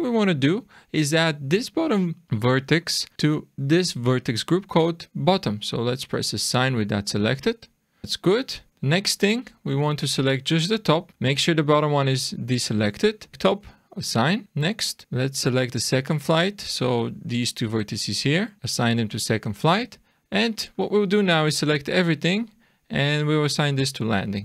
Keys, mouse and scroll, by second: 6.8 click, 7.6-8.3 scroll down 4, 8.0 middle click, 8.3-9.5 scroll up 2, 8.7 middle click, 9.5 click, 10.6 scroll down 1, 11.1 middle click, 13.3 click, 13.9 click, 14.4 click, 18.6 click, 20.1 click, 20.7 click, 22.3 click, 23.7 click.